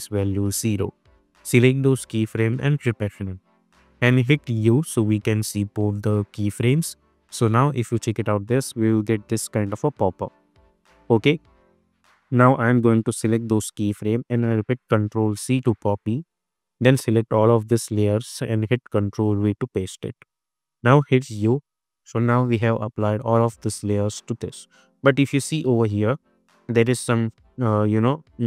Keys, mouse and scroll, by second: 0.3 Return, 1.2-1.8 drag, 2.8 F9, 3.5-5.0 typing, 6.1 click, 6.8 space, 8.3-8.9 click, 8.7 space, 10.6-11.2 drag, 15.3 ctrl+c, 16.0 click, 17.5 shift+click, 19.0 ctrl+v, 20.3 click, 20.9 u, 22.8 space, 27.6 ctrl+z.